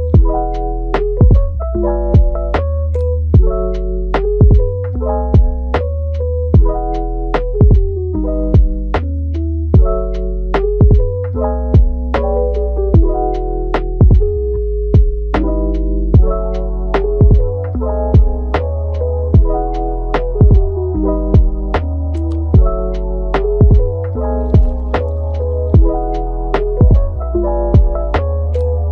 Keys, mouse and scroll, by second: 1.0 click, 1.3 g, 1.8 click, 2.2 g, 2.7 click, 3.1 g, 3.9-6.7 middle drag, 6.7 click, 7.1 g, 8.4-8.9 middle drag, 8.9 g, 9.7 click, 10.1 g, 11.3-11.9 middle drag, 11.9 Tab, 12.5 shift+d, 13.5 middle click, 13.9 g, 16.8 middle click, 17.3 r, 18.0 middle click, 18.9 Tab, 19.4 click, 19.8 g, 20.4 click, 20.8 g, 21.4 middle click, 21.8 g, 22.6 click, 23.0 g, 23.6 middle click, 24.4 click, 24.6 g, 25.5 g, 26.3 click, 26.5 g, 27.6 click, 28.3 click, 28.6 g.